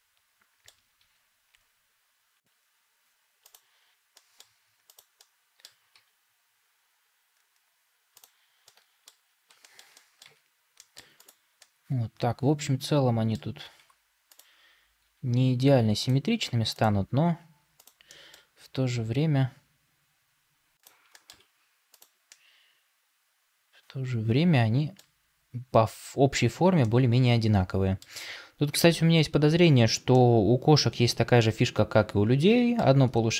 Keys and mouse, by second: 0.9 g, 4.0 middle click, 5.1 middle click, 5.8 g, 8.5 middle click, 9.5 shift+middle click, 9.8 middle click, 10.1 Tab, 10.7 middle click, 11.5-13.2 middle drag, 13.7 Tab, 14.9 g, 18.0 middle click, 18.5 g, 21.0 middle click, 21.2 Tab, 22.2-24.9 middle drag, 26.7-27.9 middle drag, 30.0-32.7 middle drag.